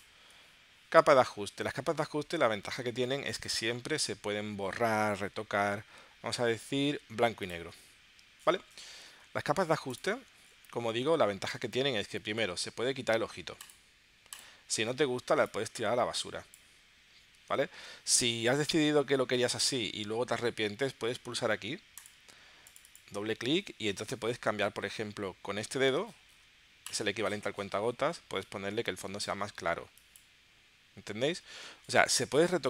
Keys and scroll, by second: 17.7 super+z.